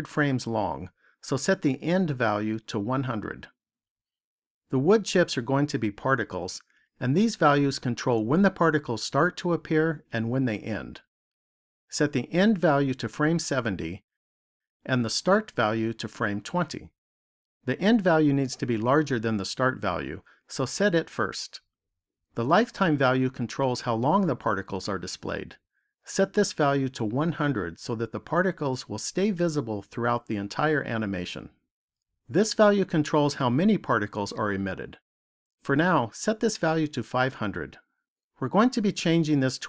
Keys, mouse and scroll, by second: 1.6 click, 3.1 KP_0, 12.5 click, 16.1 click, 26.8 click, 28.7 KP_0, 35.9 click, 38.0 KP_0.